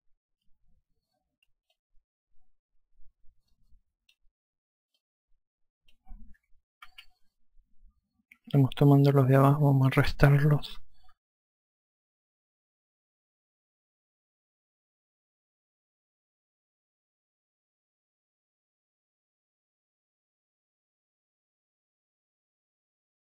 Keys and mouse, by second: 4.1 click, 5.6 click, 7.5 ctrl+z, 8.8-9.6 typing, 10.6 ctrl+click, 13.5-14.4 typing, 15.2 click, 19.0 click, 20.6 click.